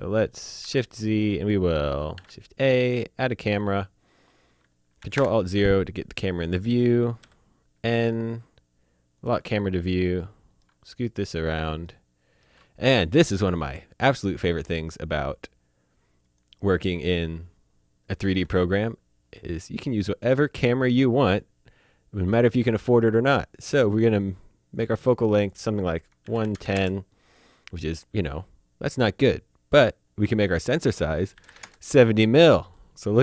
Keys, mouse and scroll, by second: 0.3 click, 0.6 shift+z, 0.9 click, 2.1 shift+a, 3.2 click, 5.0 ctrl+alt+Num_Lock, 5.1 ctrl+alt+KP_0, 7.2 n, 8.1-9.2 scroll down 1, 9.2 click, 9.6 scroll down 1, 10.0 shift+middle click, 11.0 middle click, 11.8 shift+middle click, 14.5 click, 16.2 click, 24.7 click, 26.2 KP_1, 26.5 KP_0, 26.7 KP_Enter, 30.4 click, 31.3 KP_7, 31.4 KP_0, 31.6 KP_Enter, 32.9-33.2 shift+middle drag.